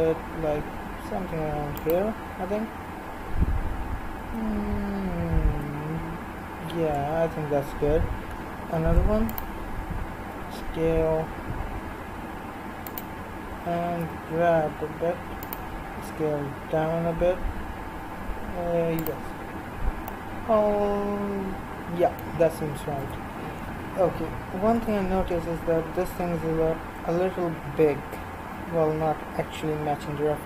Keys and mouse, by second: 8.7 ctrl+r, 13.5 g, 16.0 s, 23.0 KP_1, 24.8 a, 25.0 a.